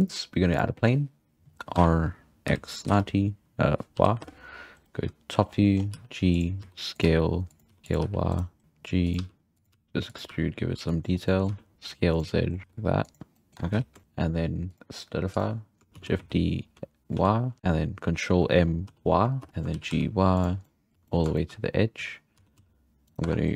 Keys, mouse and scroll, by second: 1.1-1.7 scroll down 1, 1.7 scroll down 1, 1.8 r, 5.4-5.9 scroll down 4, 5.9-8.0 typing, 9.2 e, 9.7 e, 10.3 e, 11.3 middle click, 11.5 z, 11.7 s, 12.4 scroll down 1, 12.5 middle click, 12.6 g, 13.3 middle click, 13.6 Tab, 13.7 z, 14.1-14.7 scroll up 2, 14.7-15.9 drag, 15.9 shift+middle click, 16.0 shift+d, 17.6 ctrl+m, 19.5 shift+middle drag, 19.7 g, 20.6 middle drag, 20.9 g, 21.1-21.7 shift+middle drag, 21.7-22.4 scroll up 3, 22.4 s, 23.2 Tab.